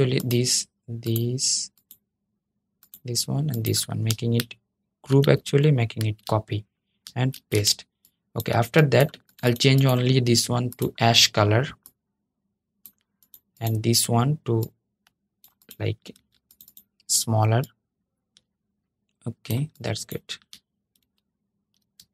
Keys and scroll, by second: 4.9 super+g, 5.7 super+c, 7.0 super+v, 15.8 super+z, 20.7 super+z, 21.7 shift+super+z.